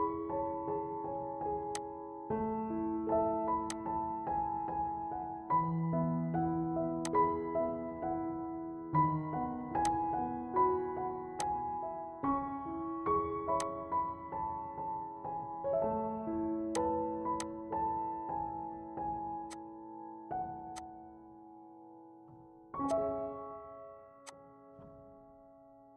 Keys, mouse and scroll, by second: 8.7 right click, 9.9 click, 13.7 click, 16.8-19.5 drag, 19.5-21.9 drag, 21.9-22.3 scroll up 1, 22.9-24.2 drag, 24.2-25.7 drag.